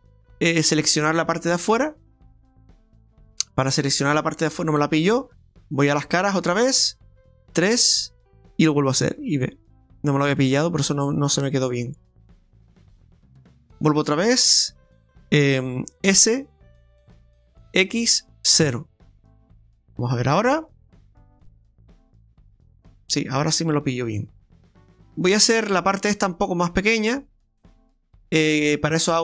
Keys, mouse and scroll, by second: 0.2 middle click, 1.2 scroll up 1, 4.9 middle click, 5.9 click, 6.4-7.5 scroll down 1, 7.5 KP_3, 9.0 b, 13.3 middle click, 16.0 middle click, 16.1 s, 20.2 middle click, 22.2 click, 22.6 middle click.